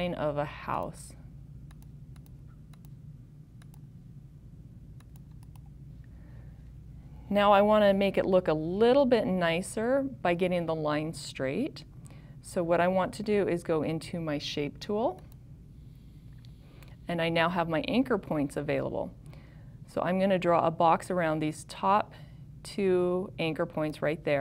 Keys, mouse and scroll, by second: 0.0 click, 1.8 click.